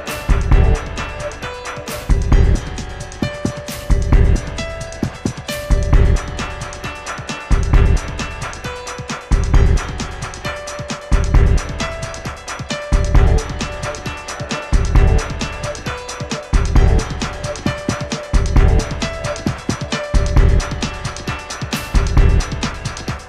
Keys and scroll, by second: 19.6 v.